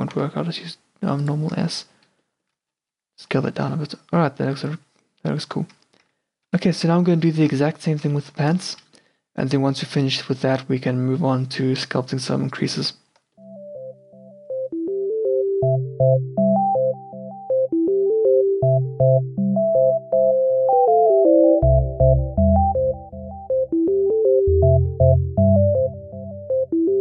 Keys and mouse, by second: 0.2 s, 1.7 Tab, 2.3 middle click, 2.7 a, 2.9-3.5 middle drag, 3.0 q, 3.5 a, 3.9-4.3 middle drag, 3.9 a, 6.1 q, 6.9 q, 7.7 q, 14.5 Tab, 14.9-27.0 typing, 17.5 Tab, 18.3 Tab, 19.8 ctrl+r, 21.3 alt+s, 21.7 alt+s, 22.2 alt+s, 22.6 ctrl+r, 22.9 ctrl+r, 23.1 ctrl+r, 23.4 Tab, 24.1 Tab, 25.8 Tab, 26.0 Tab.